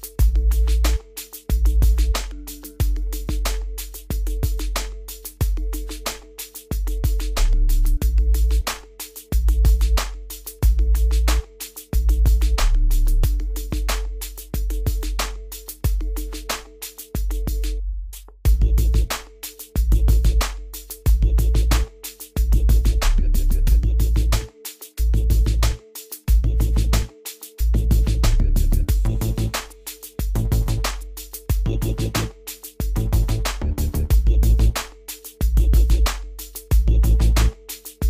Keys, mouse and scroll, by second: 0.0-4.3 drag, 4.3-4.7 scroll up 1, 4.8-5.6 scroll down 1, 5.6-12.8 drag, 12.8 scroll up 1, 13.2 scroll down 1, 14.8-18.8 drag, 18.8 scroll up 1, 20.0 scroll down 1, 21.7 scroll up 1, 22.4 scroll up 1, 22.4 scroll down 1, 24.1-24.4 scroll up 1, 24.6-25.1 scroll up 1, 25.1-25.6 scroll down 1, 26.4 scroll up 1, 27.7 scroll up 1, 28.0 click, 33.0-33.8 scroll down 1, 34.8 click.